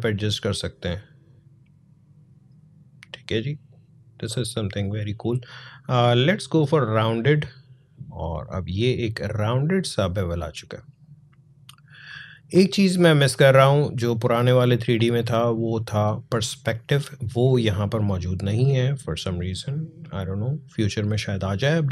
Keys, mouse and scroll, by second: 9.8-21.9 drag.